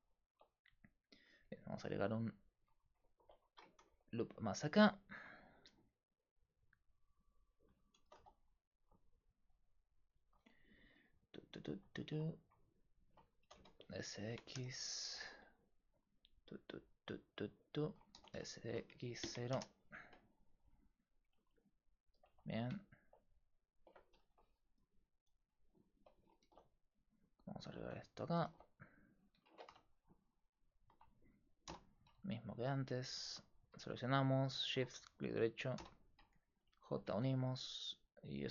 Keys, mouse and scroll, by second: 0.3 ctrl+r, 2.2-3.8 drag, 3.8 ctrl+r, 4.6-10.1 right drag, 8.1 s, 10.9 right click, 13.5 s, 18.2 s, 21.4 Tab, 22.3 Tab, 24.2 ctrl+r, 26.4 ctrl+r, 27.8 ctrl+r, 28.5 ctrl+r, 29.5 ctrl+Tab, 29.9-32.9 drag, 31.7 j, 35.8 j, 36.5 a, 37.1 Tab.